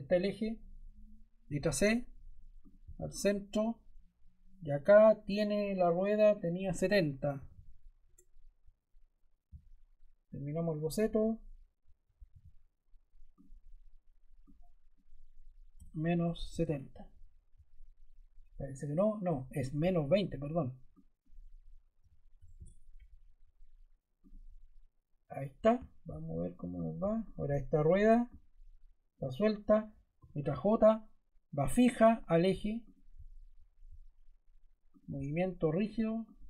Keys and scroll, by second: 1.3 c, 7.0-7.9 typing, 7.9 Return, 12.2 e, 15.6-17.0 typing, 21.6-22.9 typing, 30.0 j.